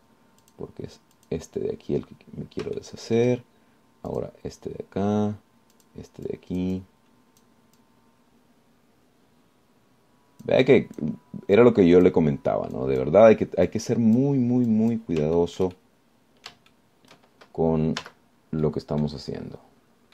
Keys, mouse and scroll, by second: 1.7 click, 2.4 click, 4.0 shift+middle click, 5.3 click, 6.9 click, 7.5-8.9 drag, 9.0-12.4 drag, 12.8 click, 14.0 click, 14.9 click, 15.9 click, 16.6 shift+click, 16.9-17.4 shift+scroll down 2, 17.4 click, 17.7 shift+right click, 19.2 z, 19.9 right click.